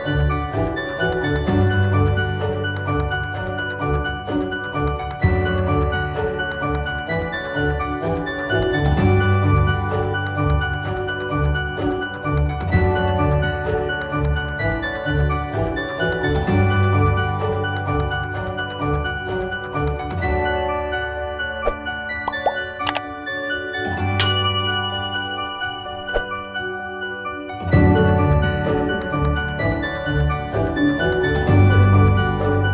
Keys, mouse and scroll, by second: 3.7 click, 9.2 click, 10.9 ctrl+z, 11.7 click, 20.5 click, 23.9 click, 28.1 click, 32.3 click.